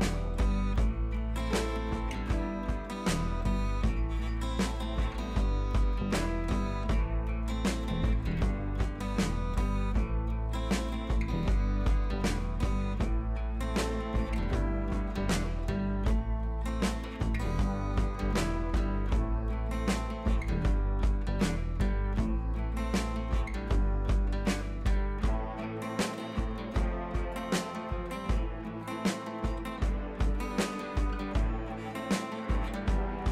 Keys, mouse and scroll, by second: 11.2-17.3 drag, 22.3-25.3 scroll up 1, 25.3 click, 26.3-27.4 scroll down 1, 27.4 click, 27.6-28.6 scroll down 1, 28.6 click, 31.2 shift+Num_Lock, 31.2 click, 31.4 shift+t.